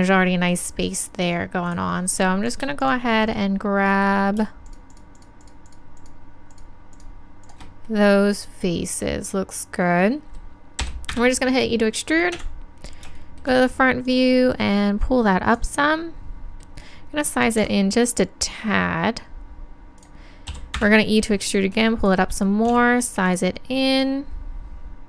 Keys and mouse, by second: 1.7-5.8 drag, 12.4 KP_1, 17.6 s, 20.1-22.7 drag, 20.6 e, 22.7 s.